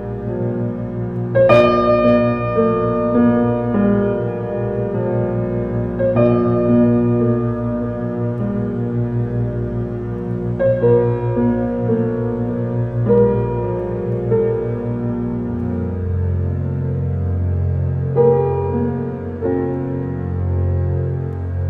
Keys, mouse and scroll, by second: 2.6 g, 4.5 alt+middle click, 5.3 g, 7.4 s, 8.5-10.4 middle drag, 10.4 s, 12.2-14.2 middle drag, 14.4 shift+d, 16.0 r, 17.0 shift+d, 19.0 r, 21.2 shift+d.